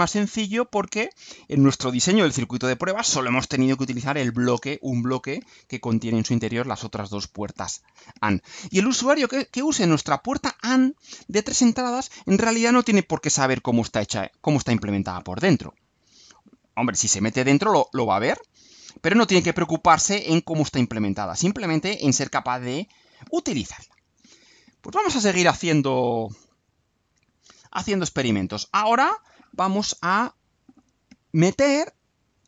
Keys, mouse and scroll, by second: 17.3 click, 21.3 click, 28.3 click, 29.4 click, 30.7 click.